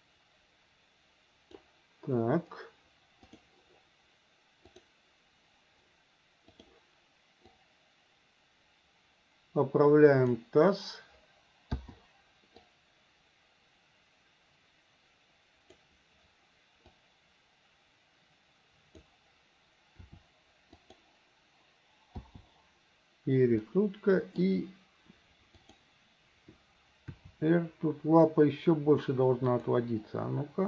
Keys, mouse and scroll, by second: 3.3 click, 4.8 click, 7.5-10.4 drag, 11.8 i, 12.7-15.8 drag, 16.9-19.0 drag, 20.1 r, 22.3 i, 23.7-24.5 middle drag, 25.7 click, 27.1 r.